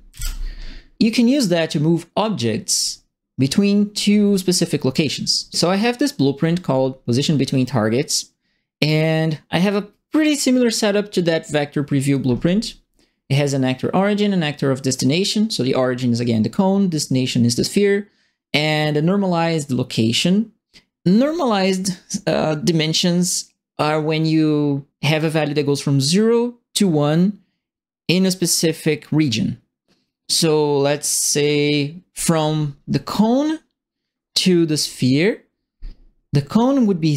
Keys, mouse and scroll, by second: 0.1 KP_1, 2.7 click.